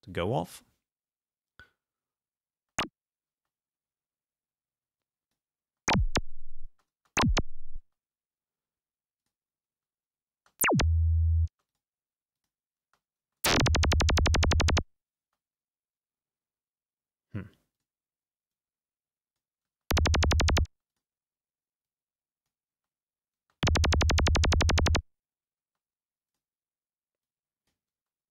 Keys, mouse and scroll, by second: 2.6 space, 3.4 space, 5.1 click, 5.8 space, 6.8 space, 7.9 space, 9.2 click, 9.8 space, 10.5 space, 11.6 space, 11.8 click, 12.4 click, 12.9 space, 15.3 space, 17.8 click, 18.6-19.6 drag, 19.7 space, 20.8 space, 21.0 click, 22.0 click, 22.8 space, 23.5 space, 25.7 space, 26.5 click, 27.3 click, 28.0 space.